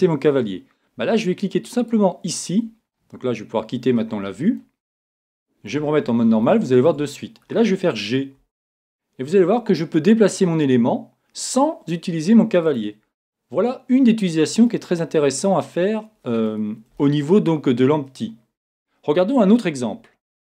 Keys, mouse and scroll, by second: 6.2 middle click, 6.7 middle click, 6.8 middle click, 8.4 g, 13.3 middle click, 13.9 middle click, 14.6-18.0 middle drag.